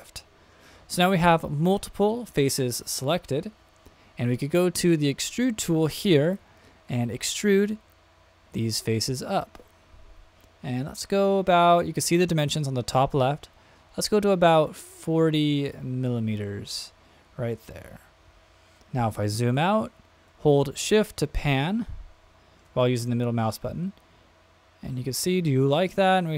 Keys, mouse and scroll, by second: 6.2 click, 7.5-16.7 drag, 17.6-20.3 scroll down 3, 20.8-23.0 shift+middle drag, 23.5-26.3 middle drag.